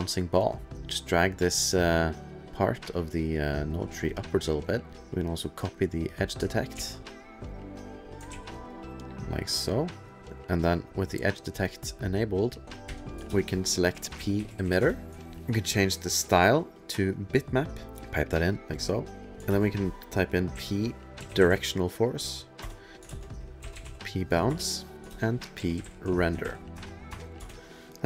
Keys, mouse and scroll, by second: 0.0 click, 0.2 click, 2.2 click, 3.5 middle click, 3.9 click, 4.1 click, 4.3 click, 4.6 click, 4.9 middle click, 5.0 click, 5.4 click, 5.9 click, 6.8 ctrl+c, 7.0 middle click, 7.8 click, 8.3 ctrl+v, 8.7 click, 9.0 click, 9.6 click, 10.0 click, 10.5 click, 11.6 click, 12.1 click, 12.9-15.1 typing, 15.1 click, 16.1 click, 16.8 click, 17.7 click, 18.0 click, 18.5 click, 19.4 shift+space, 20.5-27.1 typing, 22.6 Return, 24.5 Return, 27.4 Return, 27.9 click, 27.9 middle click.